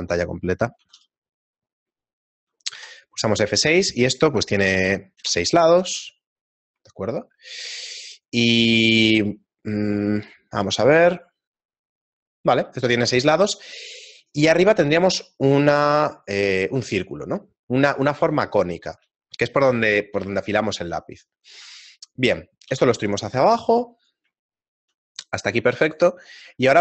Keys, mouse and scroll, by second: 0.1 middle click, 1.0 t, 1.0 n, 22.7 e, 24.4 shift+middle click, 25.9 alt+right click.